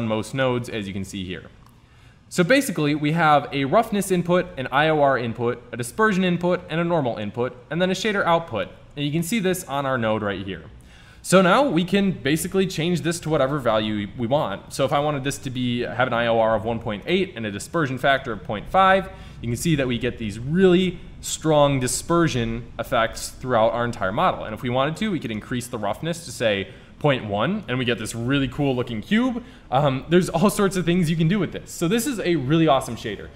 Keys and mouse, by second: 3.7 click, 8.0 Tab, 9.9-12.6 drag, 13.2-15.2 drag, 17.1-19.0 drag, 25.0-26.8 drag.